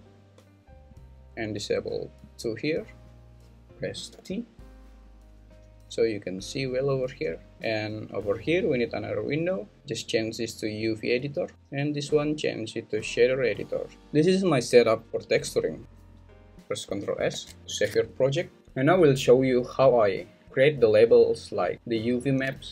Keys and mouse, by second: 4.1 t, 9.0 click, 10.1-11.3 drag, 11.6-13.3 drag, 13.9 n.